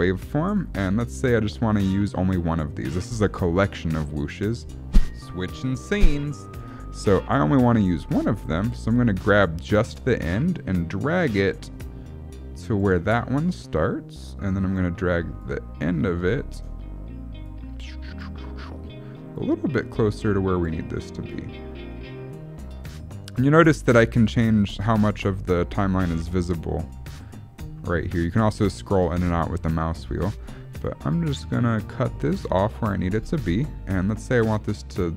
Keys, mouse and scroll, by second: 0.6 click, 3.5 click, 4.6 space, 7.8 click, 7.8 space, 13.3 click, 15.4 click, 17.4 click, 19.3 click, 21.3 click, 22.9 click, 24.6 click, 26.3 middle click, 27.6-28.6 scroll up 12, 28.6 scroll down 1, 28.8-29.3 scroll down 13, 29.2-30.4 scroll up 6, 29.8 middle click, 30.4-30.9 scroll down 1, 30.9 click, 33.0 middle click, 33.2-33.9 scroll down 6, 34.3 click.